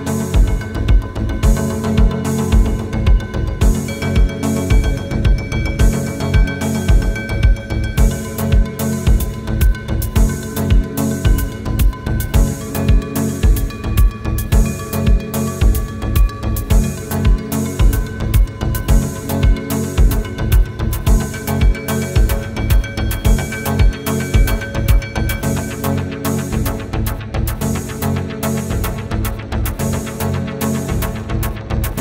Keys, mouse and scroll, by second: 2.0 scroll down 1, 2.1 space, 2.2 scroll up 1, 2.4 middle click, 2.8 scroll down 1, 3.1 scroll up 1, 3.3 middle click, 3.6 scroll down 1, 8.6 Return, 9.3 typing, 9.4 Return, 9.8 scroll down 1, 12.1 scroll up 1, 16.1 Escape, 22.0-23.3 scroll down 1, 25.5 scroll up 1, 26.2-26.6 scroll down 1, 27.2 middle click, 27.5-28.0 scroll up 1, 28.0-28.5 scroll down 1, 28.5 right click, 29.6 middle click, 30.6 scroll down 1, 31.0 scroll up 1.